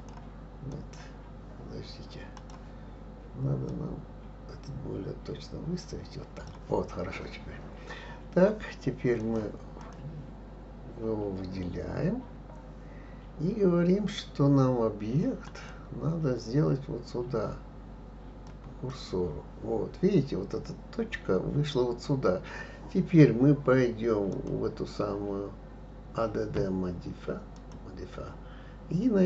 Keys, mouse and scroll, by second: 0.7 click, 2.3 click, 3.7 click, 9.2 click, 9.8 click, 15.4-18.5 drag, 24.3 click, 27.5-29.2 drag.